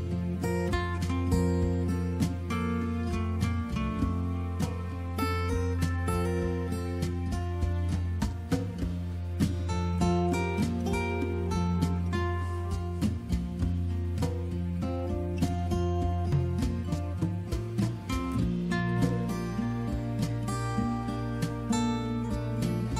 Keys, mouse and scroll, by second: 0.2 click, 0.3 click, 1.4 click, 5.0 click, 7.3 click, 9.7 click, 11.0 click, 15.2 click, 18.6 click, 20.4 click.